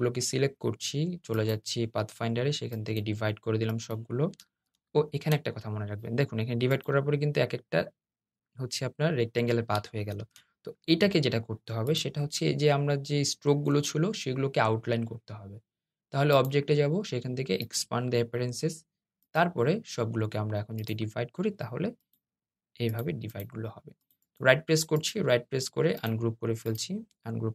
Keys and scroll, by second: 4.4 super+z, 9.9 super+z.